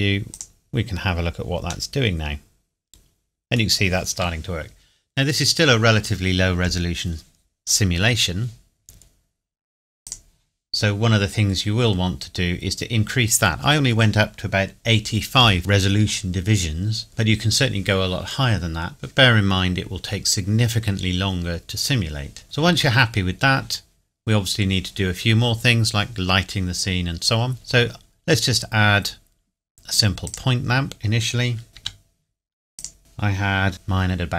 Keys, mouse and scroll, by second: 1.9 middle click, 10.0 click, 10.9 scroll up 1, 23.1-24.0 scroll up 1, 24.0 scroll down 1, 27.5 shift+a, 30.2 click, 31.7 KP_7, 31.7 g, 32.7 click.